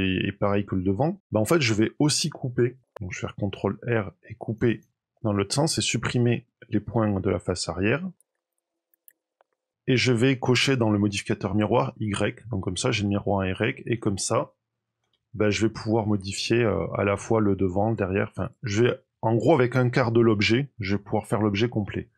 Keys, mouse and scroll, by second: 2.9 ctrl+r, 5.5 click, 5.8 middle click, 7.5 KP_7, 8.2 shift+click, 8.3 middle click, 8.7 shift+click, 8.8 shift+click, 9.0 Delete, 9.4 middle click, 11.9 click, 13.0 middle click, 13.8 click, 14.9 g.